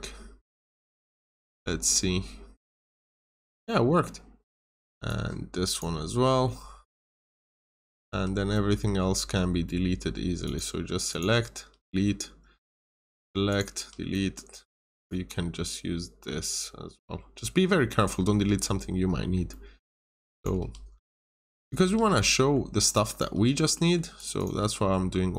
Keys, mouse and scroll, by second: 3.6 middle click, 4.3 click, 4.7 scroll up 1, 5.0 click, 6.2 scroll down 1, 6.4 middle click, 7.2 scroll down 1, 8.3 scroll down 1, 8.4 middle click, 8.8-9.6 scroll down 1, 9.6 middle click, 9.9-10.4 scroll down 1, 10.4 click, 11.7 Delete, 12.0-12.9 scroll up 1, 12.9 click, 13.7 Delete, 14.1 middle click, 14.4-15.0 scroll down 1, 15.0 click, 18.4 Delete, 18.9-19.3 scroll up 1, 19.4 middle click, 20.0 click, 20.2 double click, 20.5 Delete, 20.9 scroll up 1, 21.2 click, 21.5 double click, 21.8 Delete, 22.0 scroll down 1, 22.2 middle click, 22.8 click, 23.0 double click, 23.3 Delete, 23.5 scroll down 1, 23.7 middle click, 24.1 click, 24.3 double click, 24.5 Delete.